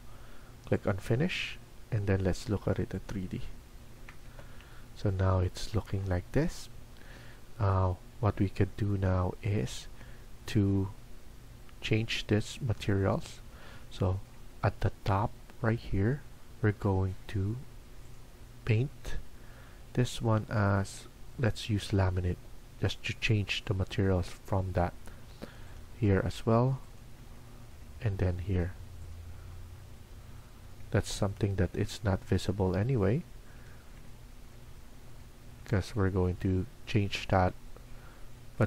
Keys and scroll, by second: 34.4 Escape.